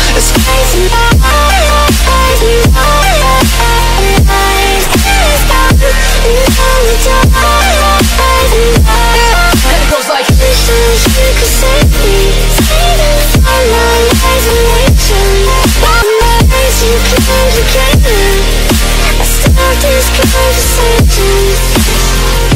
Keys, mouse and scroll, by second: 1.8 click, 2.0 alt+Tab, 3.7 click, 4.4 click, 7.2 middle click, 7.2 middle click, 8.1 click, 8.2 click, 9.7 click, 12.3 click, 13.3 click, 15.7 click, 15.8 click, 17.1 click, 17.5 alt+Tab, 19.0 Tab, 19.7 alt+Tab, 20.9-22.5 typing.